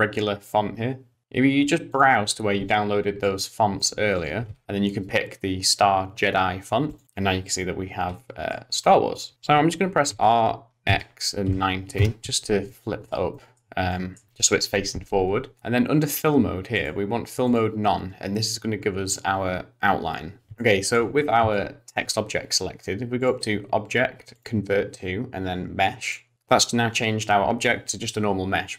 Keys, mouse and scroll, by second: 1.9 click, 8.2 middle click, 8.7 Tab, 10.5 r, 12.7 middle click, 13.3 middle click, 13.9 shift+middle click, 16.8 click, 20.5 ctrl+z, 20.5 scroll down 3, 20.6 shift+middle click, 21.1-21.5 scroll down 2, 21.5 shift+middle click, 23.2 click.